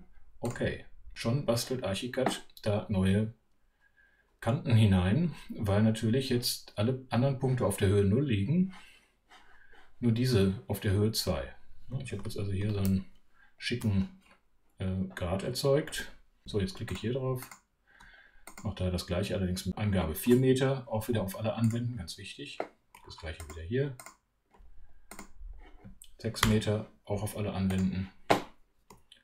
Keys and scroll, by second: 12.1 super+2, 12.7 super+3.